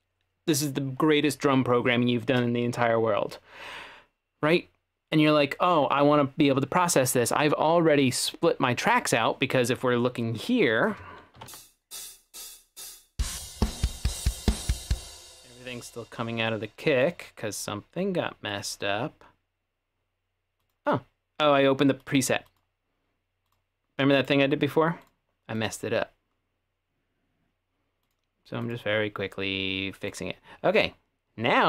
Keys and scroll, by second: 11.4 /, 11.5 space, 15.0 space.